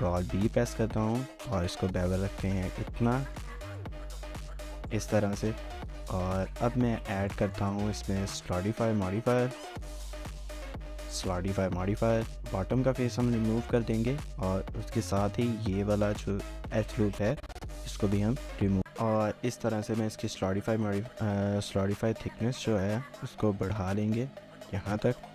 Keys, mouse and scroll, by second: 0.0 ctrl+b, 3.0 scroll down 1, 3.3 shift+middle click, 3.7 Tab, 4.2 shift+middle click, 4.9 scroll down 1, 5.6 shift+middle click, 6.3 scroll up 1, 6.5 shift+middle click, 7.7 shift+scroll up 1, 7.9 shift+middle click, 8.3-11.2 scroll up 1, 12.3 Tab, 12.7 3, 13.3 shift+scroll up 1, 13.5 shift+middle click, 13.9 scroll up 1, 14.8-15.2 scroll, 15.2 ctrl++, 16.8 ctrl++, 17.1 shift+middle click, 18.7 x, 19.1 scroll down 1, 19.3-19.6 scroll, 19.6 Tab, 19.6 scroll up 1, 19.9 shift+middle click, 20.7 shift+middle click, 22.4 shift+click, 25.2 scroll down 1.